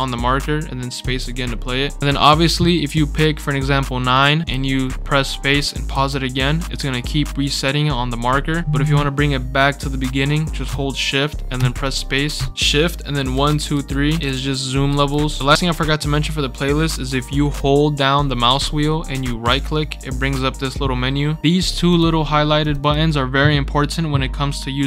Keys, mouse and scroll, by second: 0.9 space, 1.4 scroll up 2, 1.4-1.7 scroll down 4, 4.0 click, 4.4 space, 5.8 space, 11.5-15.3 typing, 19.4 right click, 21.6 click, 21.9 click, 22.6 click, 22.8 click.